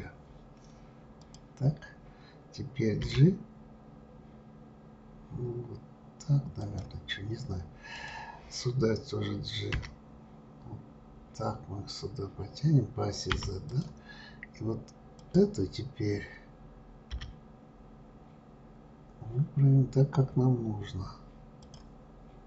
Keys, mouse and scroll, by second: 1.2 click, 3.0 g, 7.9 click, 9.7 g, 15.1 click, 17.1 g.